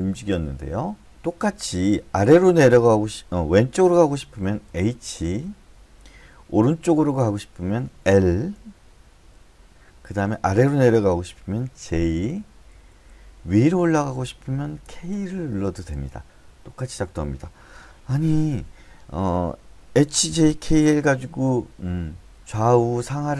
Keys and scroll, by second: 4.7 h, 5.0 h, 5.4 h, 8.1 l, 8.5 l, 9.2 l, 11.8-13.1 typing, 14.8-15.9 typing.